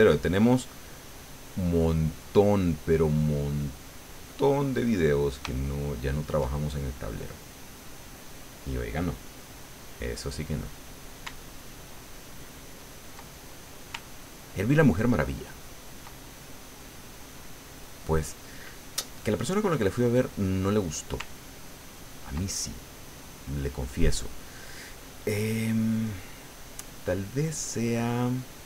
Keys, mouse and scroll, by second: 3.9 middle click, 5.3 middle click, 5.6 shift+middle click, 6.5-10.1 shift+middle drag, 10.2 middle click, 11.6 ctrl+click, 12.4-13.9 ctrl+middle drag, 14.0-16.2 ctrl+drag, 16.3-19.3 ctrl+drag, 19.4 middle click, 20.4 click, 21.3 ctrl+click, 22.4-25.0 ctrl+drag, 25.0 middle click, 26.0 click, 26.8 middle click, 28.0 middle click.